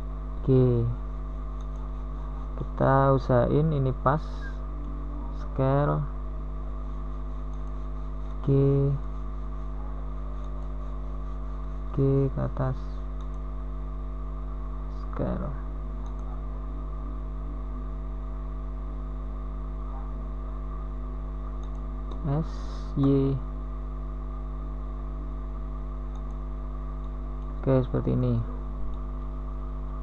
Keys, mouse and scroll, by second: 2.0 g, 4.1 s, 6.4 s, 9.1 s, 11.9 g, 13.7 middle click, 16.7 s, 20.1 g, 23.7 g, 26.6 s, 29.3 s.